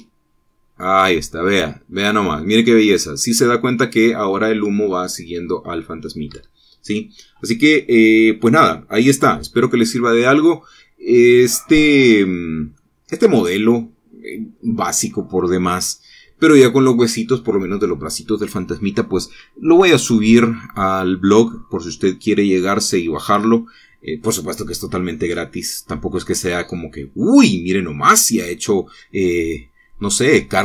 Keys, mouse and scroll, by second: 1.0 space, 7.5 Escape, 9.4-12.7 right drag, 13.1-13.4 scroll down 1, 13.4 scroll up 1, 14.0-16.8 right drag.